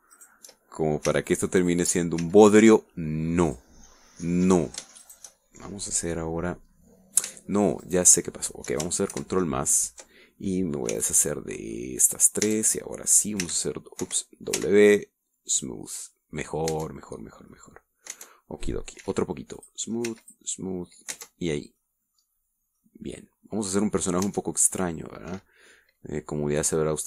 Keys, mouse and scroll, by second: 0.3 shift+right click, 1.2 shift+right click, 2.2 w, 2.7 click, 3.3 w, 4.6 click, 5.3 middle click, 6.1 shift+right click, 6.4-7.4 shift+middle drag, 8.9 shift+right click, 10.2 ctrl+KP_Add, 12.0 c, 12.6 middle click, 13.5 Tab, 14.5 w, 15.1 Escape, 15.7 w, 16.6 click, 17.8 Tab, 18.3-18.6 scroll down 1, 18.6 click, 18.8-19.4 middle drag, 19.2 Tab, 19.6 scroll up 1, 20.1 w, 20.7 click, 21.2 w, 21.4 click, 22.2 Tab, 22.6-23.9 scroll down 4, 22.9 middle click, 23.9-25.4 drag, 25.4 Tab, 25.8-26.2 scroll up 2.